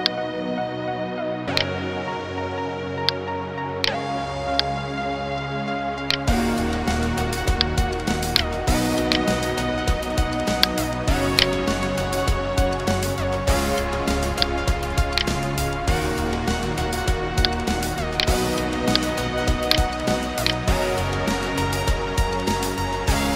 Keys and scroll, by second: 13.0 ctrl+0, 13.7 space, 14.7 space, 16.1 Delete.